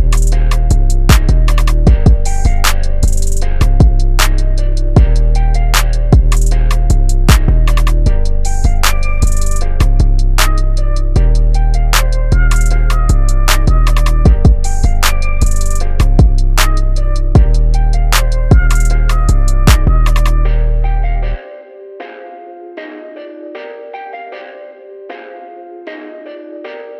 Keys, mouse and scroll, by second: 0.4 click, 1.7-3.0 typing, 3.6 click, 11.8 i, 16.5 click, 16.8 v, 17.5 click, 21.2 Tab, 22.4 shift+Tab, 23.3 Tab, 25.3 click.